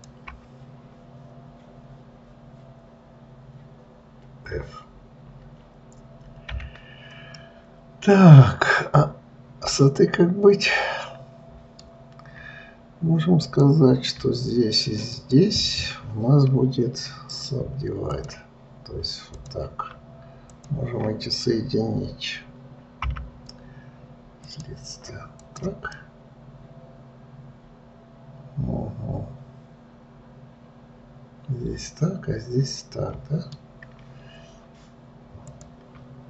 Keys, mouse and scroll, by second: 0.1 shift+click, 7.7-10.8 middle drag, 13.7 click, 15.4 shift+click, 17.7-19.6 right drag, 19.6 click, 20.9 shift+click, 23.4 m, 25.8 click, 26.3-29.4 middle drag, 35.8 click.